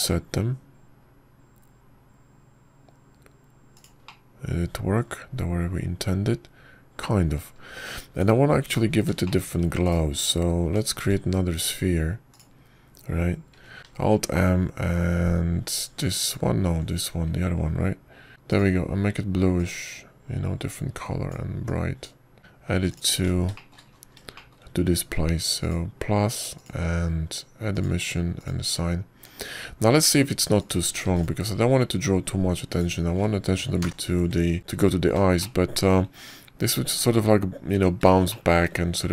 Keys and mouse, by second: 0.2 middle click, 1.9 middle click, 5.9-9.4 middle drag, 10.0 Tab, 11.1 shift+click, 11.8 /, 12.8 shift+a, 13.8 ctrl+z, 14.1 click, 15.5 alt+m, 18.1 click, 18.3 ctrl+z, 18.4 click, 20.3 click, 20.4-22.4 middle drag, 23.3 middle click, 23.4 Tab, 24.1 Tab, 24.2-24.7 middle drag, 24.7 click, 24.9 middle click, 25.1 Tab, 25.4 shift+middle click, 25.6 shift+middle click, 25.7 middle click, 26.2 shift+middle click, 27.5 drag, 28.4-29.9 drag, 30.2 click, 31.0 Tab, 32.5 click, 32.9 x, 34.6 ctrl+KP_0, 36.3 middle click, 37.3-37.8 shift+middle drag.